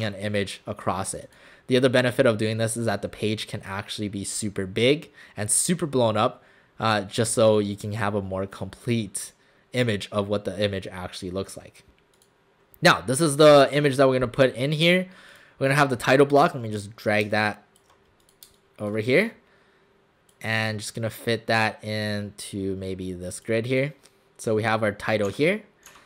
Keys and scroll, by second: 18.5 space, 25.3 w, 25.9 w.